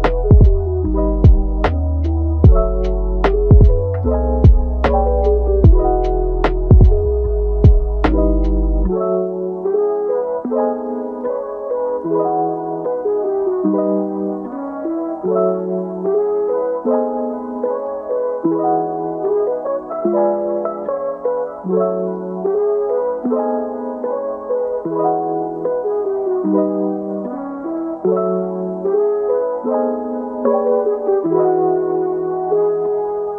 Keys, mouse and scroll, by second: 2.5 g, 3.5-5.7 middle drag, 5.7 g, 8.1-9.3 middle drag, 9.3 Tab, 10.0 g, 11.5 g, 12.8-13.8 middle drag, 13.8 g, 14.9-15.5 middle drag, 15.5 click, 15.9 middle click, 16.4 g, 17.7 middle click, 18.4 click, 18.6 g, 19.4 middle click, 20.4 click, 20.7 middle click, 21.5 g, 22.1 middle click, 22.8 scroll down 2, 23.1-25.5 middle drag, 25.5 g, 27.1 click, 27.3 g, 28.6 middle click, 29.2 g, 30.3-31.4 middle drag, 31.4 g, 32.1 middle click, 32.6 click, 33.0 g.